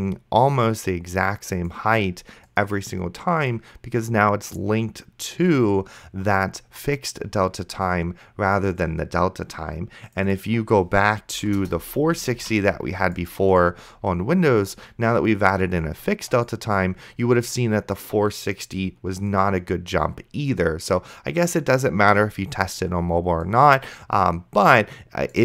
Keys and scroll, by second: 11.6 KP_0, 12.6 ctrl+s.